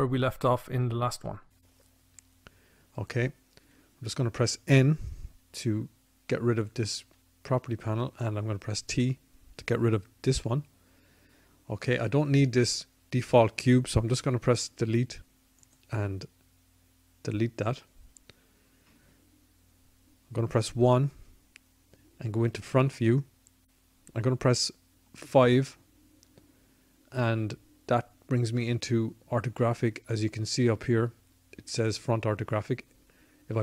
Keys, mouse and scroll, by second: 5.9 n, 9.2 t, 13.3 Delete, 19.9 KP_1, 24.9 KP_5, 33.1 KP_5.